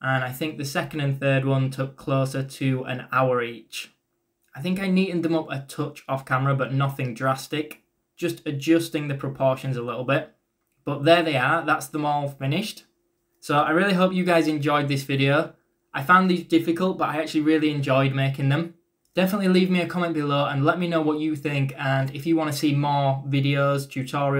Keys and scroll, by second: 1.2-3.1 typing, 15.4-16.2 typing, 17.9 ctrl+z, 19.1-22.3 typing, 23.6-24.3 typing.